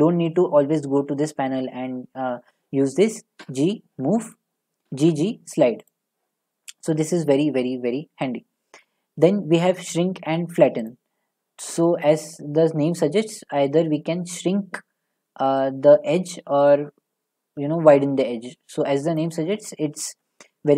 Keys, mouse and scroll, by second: 3.4 g, 4.3 right click, 4.9 g, 5.0 g, 5.9 right click, 7.1 middle click, 7.8 middle click, 10.9-14.0 drag, 19.2 click, 20.1 middle click, 20.2 middle click.